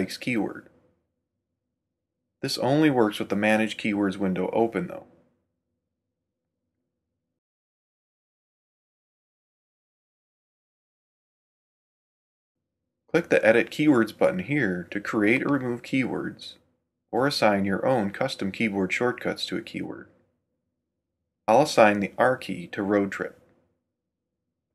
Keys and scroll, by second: 1.7 h, 3.8 super+k, 5.6 h, 6.6 Right, 7.4 h, 8.7 h, 9.0 Right, 9.8 h.